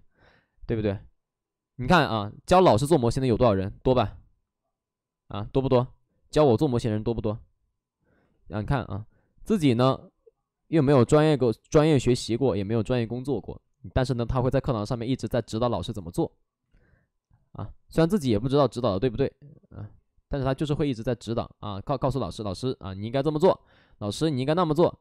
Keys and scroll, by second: 5.2 ctrl+z, 8.1 ctrl+z, 9.6 ctrl+z, 11.8 ctrl+z, 13.3 ctrl+z, 16.5 ctrl+z, 17.8 ctrl+z.